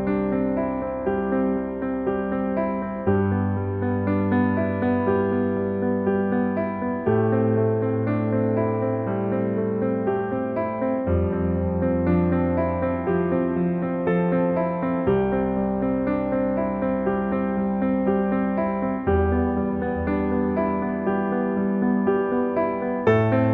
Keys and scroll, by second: 0.3 Escape, 1.1 ctrl+s, 9.5 s, 16.1-16.9 typing, 17.2 Return, 21.3 s.